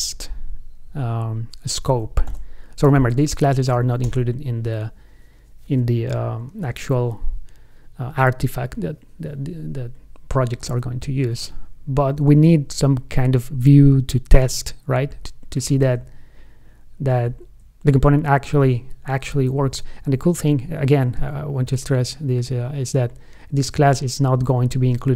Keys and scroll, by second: 16.0 super+Right, 17.5 super+Left.